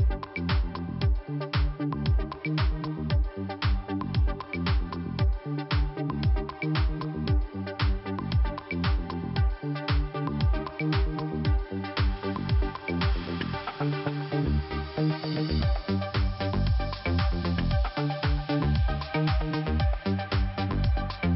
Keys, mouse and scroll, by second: 0.5 click, 0.7 click, 1.9 click, 2.0 click, 2.9 click, 4.3 click, 4.8 click, 6.1 click, 8.3 scroll down 1, 9.1 click, 10.2 click, 10.3 click, 14.4 click, 17.5 click, 19.3 click.